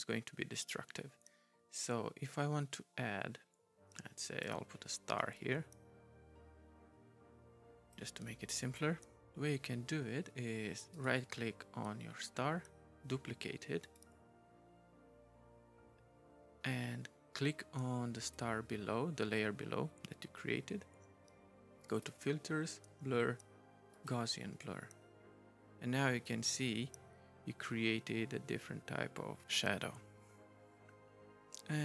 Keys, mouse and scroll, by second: 1.8 right click, 5.4 right click, 10.9 click, 13.8 right click, 18.2 right click, 21.9 right click, 23.9 right click, 26.2 right click.